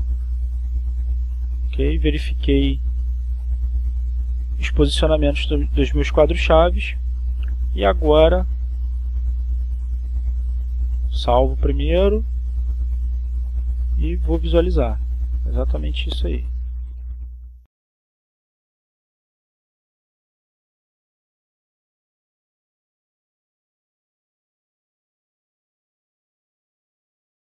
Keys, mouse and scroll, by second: 5.2 click, 6.5 click, 8.7-9.6 drag, 9.7 click, 11.6 click, 13.3 click, 14.3 click, 16.0-17.2 drag, 17.5 click, 18.4 click, 19.5-23.2 drag, 23.6 click, 24.4 click, 25.7-27.3 drag.